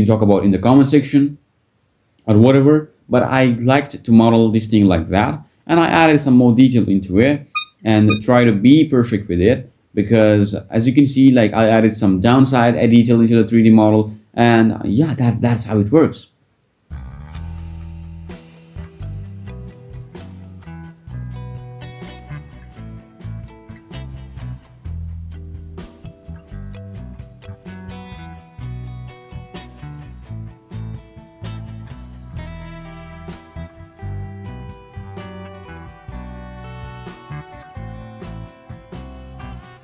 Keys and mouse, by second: 0.3 ctrl+drag, 0.5 ctrl+click, 0.8 ctrl+b, 1.7 ctrl+z, 1.8 ctrl+z, 2.5 g, 2.7 click, 3.2 ctrl+b, 4.4 alt+e, 5.1 click, 5.4 click, 5.8 super+click, 6.0 super+click, 6.8 ctrl+b, 7.1 Tab, 7.4 Tab, 7.6 Tab, 8.8 e, 9.9-11.3 drag, 11.3 e, 11.9 click, 13.9 click, 14.9 shift+click, 16.4 ctrl+b, 18.2 Tab, 19.2 ctrl+z, 19.3 ctrl+z, 19.4-20.0 ctrl+z, 20.2 ctrl+z, 20.4 ctrl+z, 20.5 ctrl+z, 20.6 ctrl+z, 22.7 click, 23.9 z, 25.5 click, 26.2 z, 26.8 click, 27.1 g, 28.5 Tab, 28.8 Tab, 29.5 ctrl+b, 30.0 Tab, 31.0 Tab, 31.9 click, 32.2 shift+click, 32.5 e, 32.7 click, 32.8 Tab, 33.3 Tab, 34.7 Tab, 39.4 Tab.